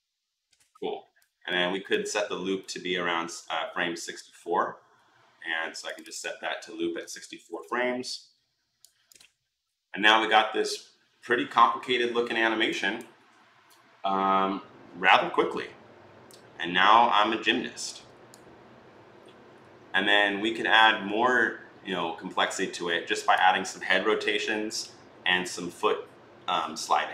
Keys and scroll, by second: 6.8-7.2 typing, 7.3 Return.